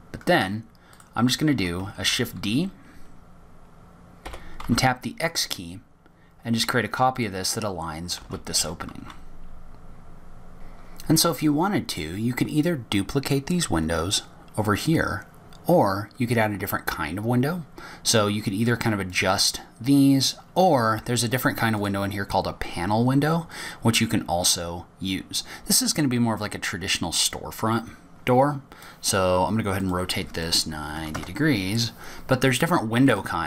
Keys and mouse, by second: 1.8 shift+d, 8.0 shift+d, 11.5 click, 11.6 middle click, 23.2 click, 28.7-30.2 drag, 31.3-33.2 drag.